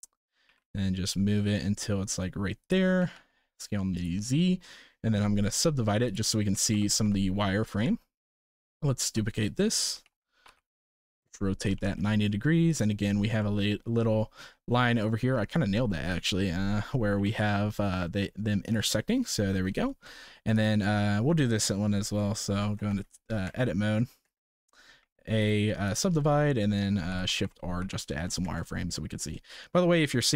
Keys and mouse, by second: 0.4 g, 2.9 s, 4.3 shift+middle drag, 5.3-6.2 drag, 6.5 shift+r, 6.7 shift+r, 6.8 shift+r, 7.0 shift+r, 7.8 Tab, 8.9 shift+d, 9.9 r, 11.7 g, 13.4 middle click, 15.0 shift+middle click, 16.0 shift+middle click, 17.1 g, 20.0 shift+middle drag, 20.5 click, 21.4 shift+middle drag, 22.7 Tab, 23.4 Tab, 24.2 Tab, 25.0 a, 25.5 right click, 27.0 shift+r, 27.2 shift+r, 27.4 shift+r, 27.8 shift+r, 28.4 Tab, 29.4 shift+middle click.